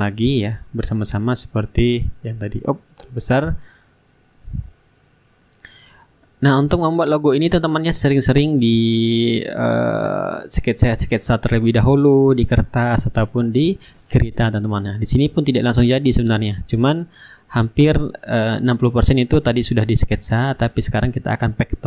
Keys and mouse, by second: 4.7-6.7 shift+drag, 6.9-12.1 drag, 7.5 shift+right click, 8.4 right click, 9.5-12.1 right drag, 9.6-10.7 middle drag, 11.0-12.1 middle drag, 12.6 click, 13.5 ctrl+d, 13.9-16.3 ctrl+drag, 16.1 ctrl+z, 16.9-18.0 middle drag, 18.0 shift+click, 19.2 ctrl+g, 19.8 shift+right click, 20.6-21.7 middle drag, 21.3 ctrl+d, 21.7-21.8 ctrl+drag.